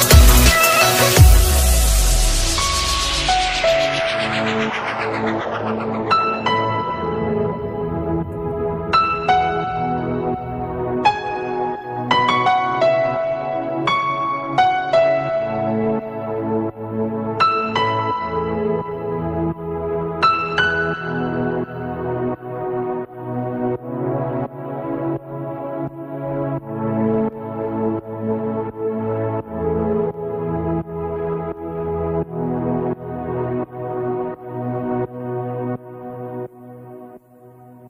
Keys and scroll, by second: 2.8 alt+space, 3.7 ctrl+space, 24.5 ctrl+space, 25.2 alt+space, 30.0 ctrl+space.